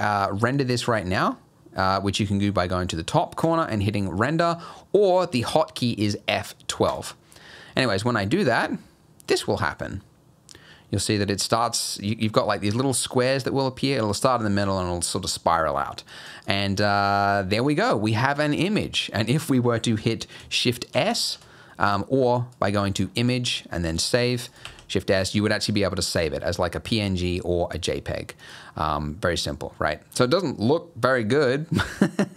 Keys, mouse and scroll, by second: 3.4 click.